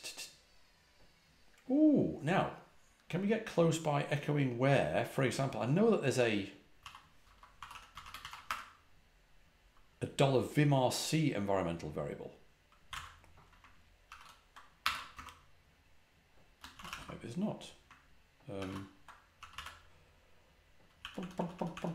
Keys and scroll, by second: 6.5-8.6 typing, 12.5-13.4 typing, 14.0 ctrl+a, 14.1 ctrl+h, 14.7 Escape, 14.8 k, 15.0 Return, 16.8 q, 16.9 Return, 18.5 ctrl+a, 18.6 ctrl+l, 19.2-21.9 typing.